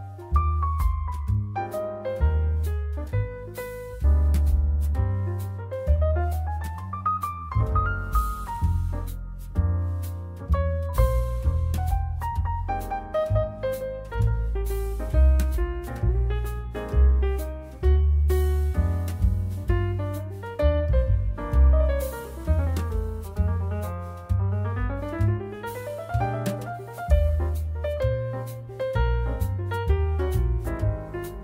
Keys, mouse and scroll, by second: 3.8-9.3 drag, 3.8-13.0 middle drag, 11.7-13.0 shift+drag, 11.7-31.4 shift+right drag, 11.7 shift+s, 15.3 g, 18.0 Tab, 18.8 2, 20.4 e, 23.0 2, 23.6 click, 25.1 ctrl+r, 29.4 Tab.